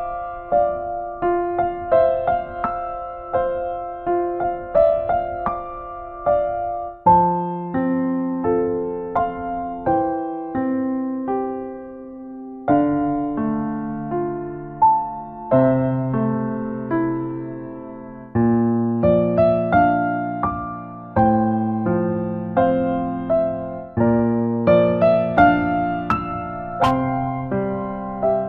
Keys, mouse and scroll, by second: 0.2 click, 1.4 click, 2.0 middle click, 2.7 click, 3.8 click, 4.5 click, 4.8 click, 5.2 middle click, 5.7 ctrl+middle click, 6.1 middle click, 7.1 middle click, 7.9 shift+middle click, 8.3 shift+middle click, 8.7 click, 11.9 ctrl+right click, 12.6 ctrl+right click, 13.1 f, 13.4 click, 15.7 click, 17.1 click, 17.1 right click, 18.5 f, 18.8 click, 20.9 click, 23.1 middle click, 23.9 right click, 24.2 ctrl+right click, 25.3 click, 28.0 shift+click.